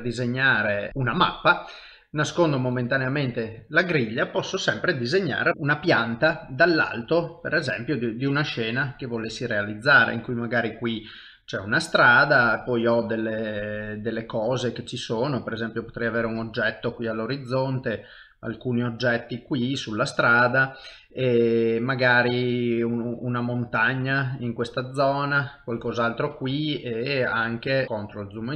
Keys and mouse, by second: 0.4 shift+middle click, 7.0 click, 13.4-26.6 click, 26.6 middle click, 27.8 shift+KP_7, 28.4 shift+middle click.